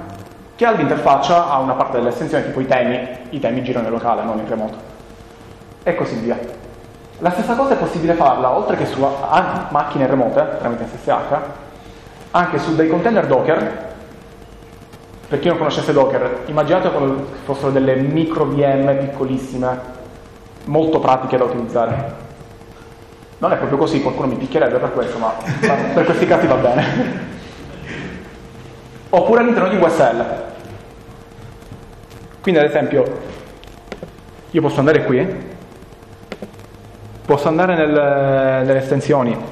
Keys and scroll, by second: 39.0 ctrl+BackSpace.